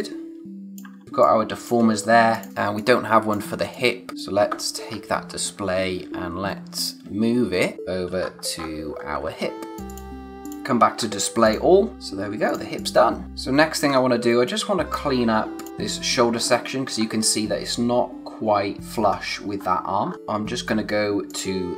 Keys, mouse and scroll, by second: 0.9 ctrl+z, 1.0 space, 1.2 click, 1.5 space, 2.3 click, 4.8-5.5 scroll down 1, 5.5 space, 8.2-9.2 scroll up 1, 9.4 alt+click, 10.9-11.4 scroll down 1, 11.4 click, 11.9 space, 12.4 click, 13.2 scroll down 1, 13.8-14.1 scroll up 1, 14.1 space, 14.4 click, 14.7 space, 15.2-15.5 scroll up 1, 15.5 click, 15.7-16.4 scroll down 1, 16.4-18.7 scroll up 1, 19.0-19.5 scroll down 1, 19.5-20.0 scroll up 1, 20.0 scroll down 1, 20.1 click, 21.2 click.